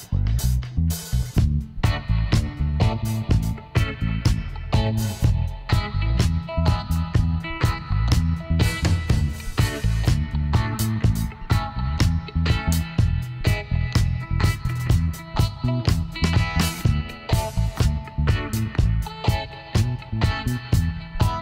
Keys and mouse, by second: 1.3-3.1 drag, 2.2 b, 4.5 e, 6.8-8.5 drag, 9.9 s, 11.7-13.4 drag, 12.5 e, 14.6-16.3 drag, 17.9 s, 21.2-21.4 right drag.